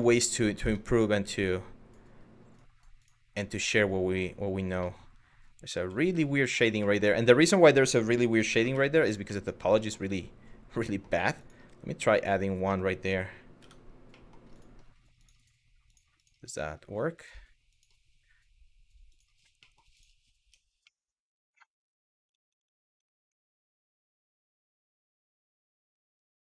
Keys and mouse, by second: 0.3 Tab, 4.5-5.2 middle drag, 5.4 ctrl+z, 5.9 middle drag, 8.4 Tab, 9.0 middle click, 9.5 shift+middle click, 10.6 middle click, 11.0 click, 13.3 Tab, 13.9 middle drag, 14.8 click, 16.8 click, 18.7 click, 19.2 middle click, 20.0 Tab, 20.6 middle click, 22.0 ctrl+z, 22.2 ctrl+z, 23.0 Tab, 24.6 Tab.